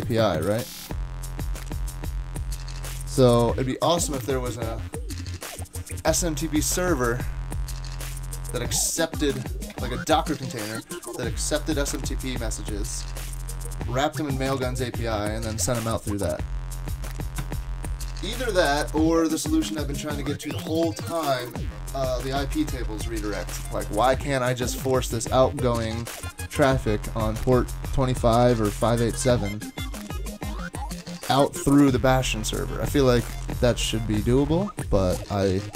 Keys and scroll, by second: 26.1 super+Tab.